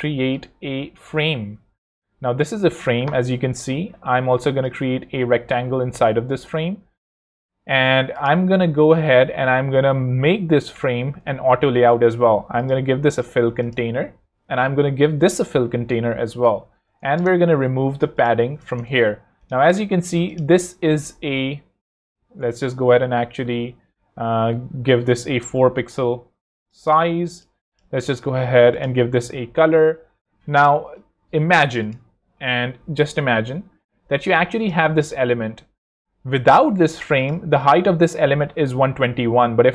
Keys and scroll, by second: 4.1 r, 10.6 shift+a, 17.1 shift+Return, 18.6 0, 18.7 Return, 19.6 super+Return, 25.1 4, 25.3 Return, 36.8 shift+super+h.